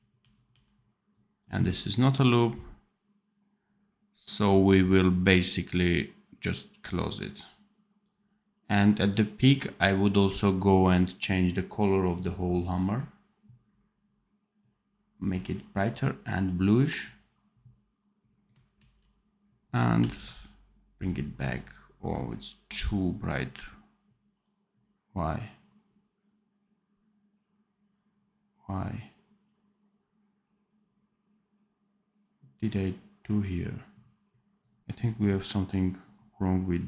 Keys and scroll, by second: 18.7 ctrl+c, 19.9 ctrl+v.